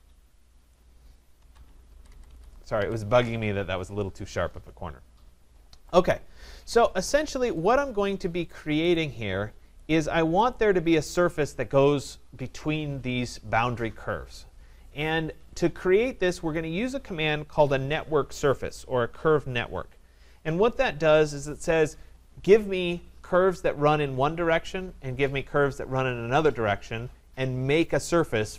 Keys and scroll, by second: 1.9 Escape.